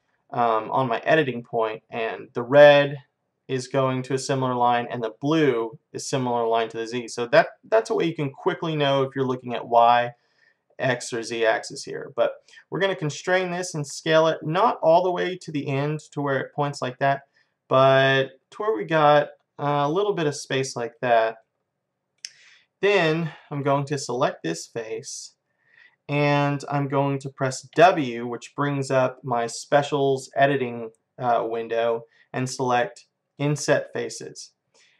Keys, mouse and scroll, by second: 21.5-24.0 middle drag, 24.0-25.9 drag, 25.9-27.8 middle drag, 27.8 w.